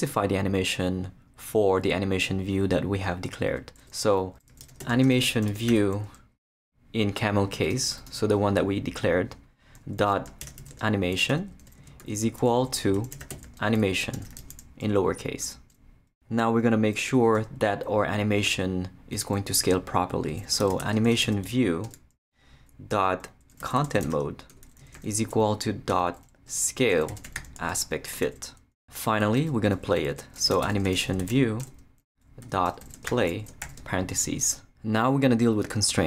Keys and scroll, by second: 3.8 Return, 4.3-6.6 typing, 9.8-14.9 typing, 11.3 Return, 17.3 Return, 20.3-21.9 typing, 23.4-25.0 typing, 26.3-28.3 typing, 29.4 Return, 30.1-34.2 typing.